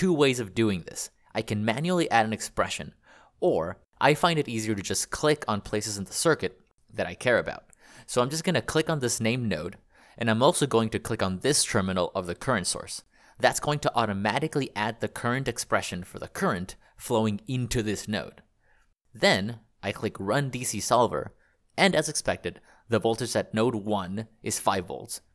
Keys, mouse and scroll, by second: 2.0 shift+v, 3.1 shift+(, 3.4 BackSpace, 3.6 BackSpace, 3.7 BackSpace, 4.0 Escape, 7.2 click, 13.0 click.